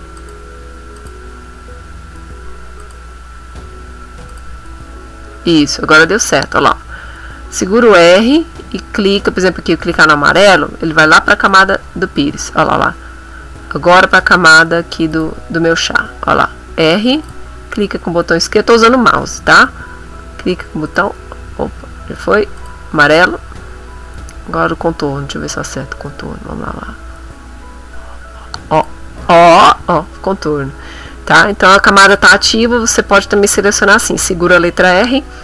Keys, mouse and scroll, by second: 0.2 click, 1.0 click, 2.8 click, 3.9 r, 4.3 click, 7.1 r, 9.9 r, 11.5 click, 15.1 click, 15.1 r, 16.2 r, 17.3 click, 20.3 r, 20.9 click, 22.6 click, 26.0 scroll up 2, 27.1 r, 28.8 click.